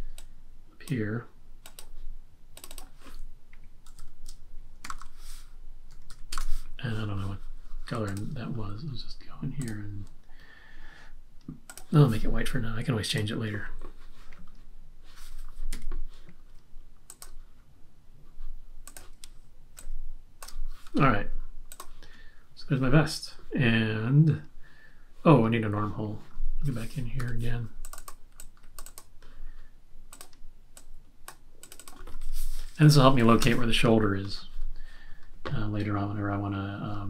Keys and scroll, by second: 3.6-6.5 typing, 7.5 typing, 15.7 x, 27.1 v, 32.6-33.6 typing, 35.0 typing.